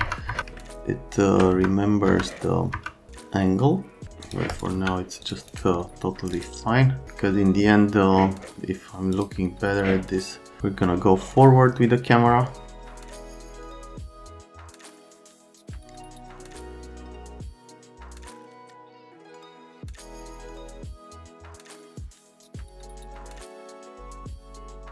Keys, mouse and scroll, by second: 0.0 F3, 0.3 F3, 0.6 alt+middle click, 1.5 F3, 2.1 F3, 2.7 F3, 3.1 alt+middle click, 4.3 click, 4.5 click, 4.7 x, 5.2 click, 5.5 right click, 6.4 click, 9.2 click, 13.3 click, 14.6 F3, 14.9 F3, 15.4 click, 15.8 click, 16.5 middle click, 17.2 click, 17.7 right click, 18.4 click, 19.1 click, 19.4 click, 20.1 click, 20.9 middle click, 22.0 click, 23.2 F3, 24.6-24.9 typing.